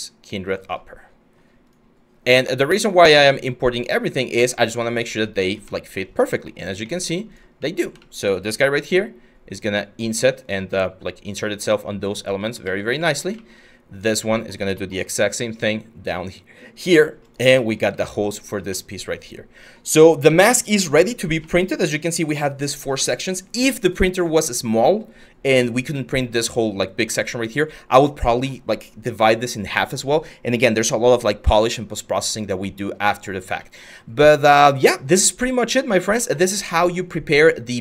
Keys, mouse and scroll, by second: 8.4 g, 12.2 ctrl+z, 15.1 g, 17.2-18.2 middle drag, 32.2-35.7 middle drag.